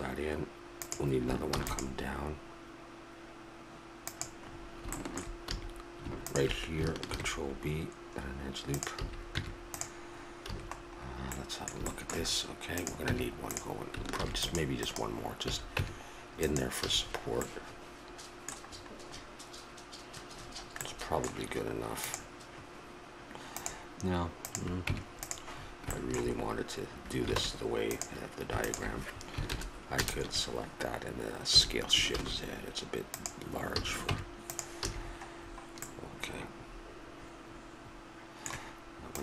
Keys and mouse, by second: 1.5 ctrl+r, 5.4 a, 6.2 click, 7.1 ctrl+b, 9.0 a, 9.4 Tab, 10.5 a, 13.0 Tab, 14.1 ctrl+r, 15.4 a, 15.8 Tab, 16.8 a, 17.0 middle click, 17.5 middle click, 17.9 middle click, 18.3 middle click, 20.4-22.1 middle drag, 24.4 right click, 24.9 Tab, 27.4 ctrl+Tab, 29.4 ctrl+KP_Add, 31.4 s, 33.7 a, 34.1 Tab, 34.8 a, 35.0-36.6 middle drag.